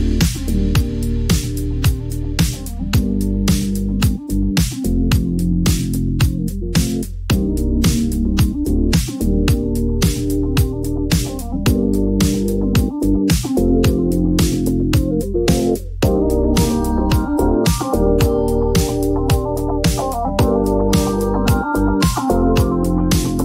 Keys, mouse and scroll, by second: 3.9 click, 4.5-7.3 drag, 10.0-12.0 drag, 12.7 click, 13.3-14.9 typing, 17.7 click, 17.9 click, 20.7 click, 21.1-22.0 typing, 22.1 Return.